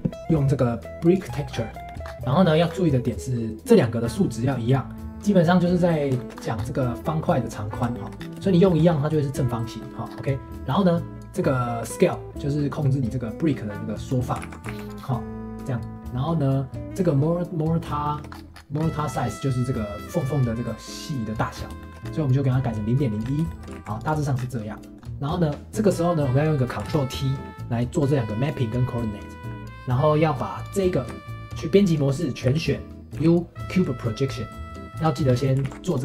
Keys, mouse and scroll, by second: 1.1 click, 1.3-1.7 scroll up 5, 1.7 middle click, 2.0 scroll down 1, 2.3 middle click, 2.5-2.9 scroll up 2, 2.9-6.4 middle drag, 6.4 scroll up 4, 6.6-7.1 scroll down 1, 7.9 shift+middle click, 8.2 scroll down 1, 8.5-10.1 shift+middle drag, 10.1-11.3 scroll up 2, 11.8-12.3 scroll up 1, 12.7-14.5 drag, 14.5 ctrl+z, 18.0 shift+middle click, 18.3-18.6 scroll up 5, 19.0-21.4 shift+middle drag, 21.5-23.1 scroll down 2, 21.8 shift+middle click, 23.1-23.5 scroll down 1, 23.5 shift+middle click, 23.7 ctrl+s, 24.3 scroll down 4, 24.7-25.8 middle drag, 25.8-27.0 drag, 28.0-30.5 drag, 30.6-31.9 drag, 31.9 middle click, 32.5 a, 34.9 Tab, 35.3 scroll down 1, 35.4 middle click, 35.6 ctrl+s.